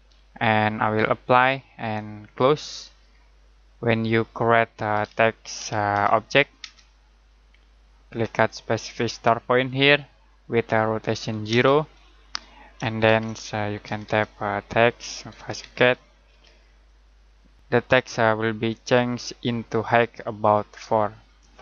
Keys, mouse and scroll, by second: 3.2 middle click, 4.7-6.6 typing, 9.4 click, 11.5 space, 13.0-16.7 typing.